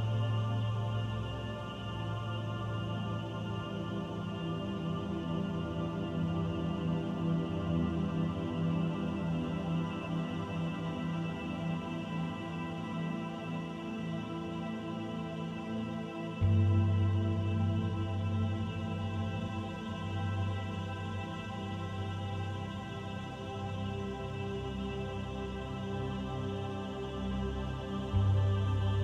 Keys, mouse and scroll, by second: 1.1 click, 4.4 middle click, 5.5 s, 7.6 middle click, 9.6 click, 10.6 middle click, 11.8 click, 12.6 middle click, 14.7 shift+middle click, 15.3 middle click, 17.2-17.7 scroll up 1, 18.3 Tab, 18.8 middle click, 20.1 ctrl+r, 25.1 Tab, 25.7 Tab, 26.1 right click, 28.9 click.